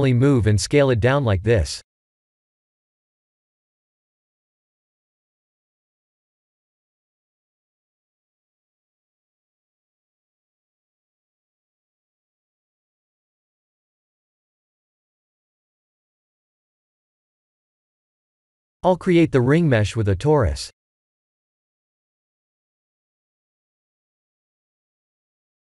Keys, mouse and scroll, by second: 0.4 KP_1, 2.3 g, 6.1 s, 14.8 Tab, 15.8 middle click, 18.3 KP_1, 19.1-20.2 scroll down 8, 20.3 shift+middle click, 21.2 click, 22.1 shift+a, 24.8 s.